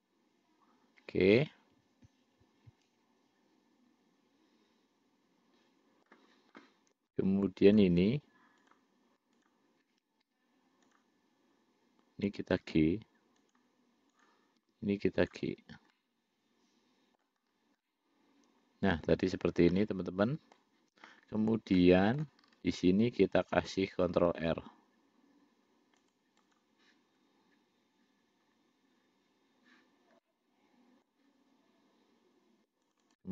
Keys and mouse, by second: 0.0-6.4 middle drag, 8.0 click, 9.6 shift+click, 12.8 g, 14.4 click, 14.9 g, 16.2-17.5 middle drag, 18.1-19.8 middle drag, 20.0 middle click, 22.1 middle click, 24.3 ctrl+r, 30.5 middle click, 33.1 click.